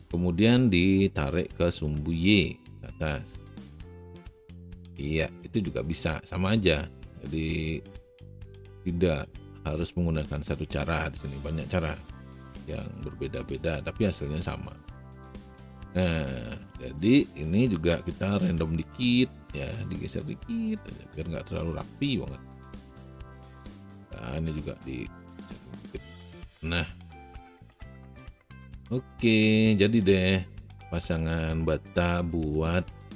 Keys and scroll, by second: 18.8 e.